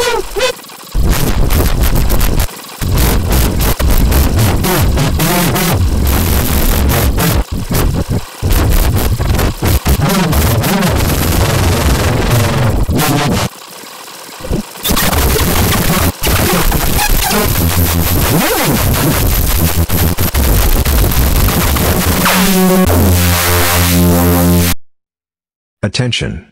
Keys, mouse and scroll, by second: 0.6 click, 0.8 click, 0.9-2.4 drag, 2.5 click, 6.6 click, 6.8 click, 7.5 click, 8.3 click, 10.7-13.4 drag, 13.5 click, 13.8 click, 14.0 click, 14.3 click, 14.7-16.1 drag, 16.1-18.1 drag, 18.1 scroll up 2, 18.5 scroll down 2, 18.8 scroll up 2, 19.0-19.7 scroll down 2, 19.8 click, 22.2-24.9 drag.